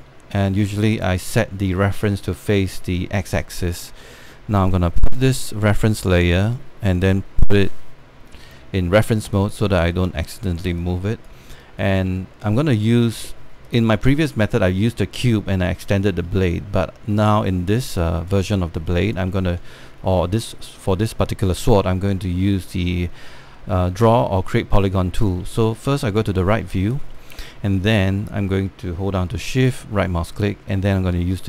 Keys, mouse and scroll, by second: 0.2 scroll down 1, 0.5 alt+click, 0.9-1.5 scroll up 2, 1.6 click, 4.2 scroll down 1, 5.8 click, 8.7 scroll up 1, 9.1 alt+click, 9.7 alt+middle click, 10.0 click, 10.8 alt+scroll down 1, 11.1 scroll up 1, 11.4 alt+click, 12.4 alt+space, 12.5-14.1 drag, 14.2 alt+scroll up 1, 14.3 alt+click, 17.2-18.0 scroll down 1, 18.5 alt+middle click, 18.6 alt+click, 19.6 alt+click, 22.4 alt+middle click, 26.0 click, 26.0 space, 27.2 scroll up 1, 27.4 scroll down 1, 27.8 alt+middle click, 30.3-31.4 shift+right drag.